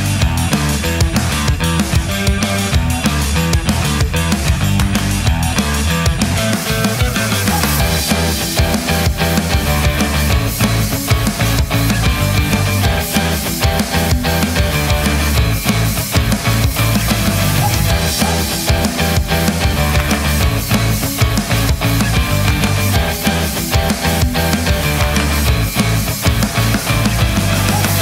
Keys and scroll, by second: 6.9 Return, 11.4 space.